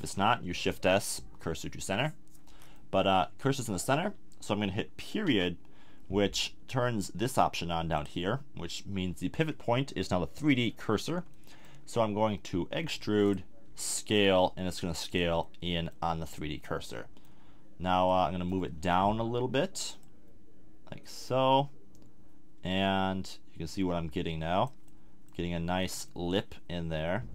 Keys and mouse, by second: 0.7 shift+s, 5.2 ., 11.3 click, 12.9 e, 13.6 s, 18.4-24.6 middle drag, 24.8-26.4 middle drag.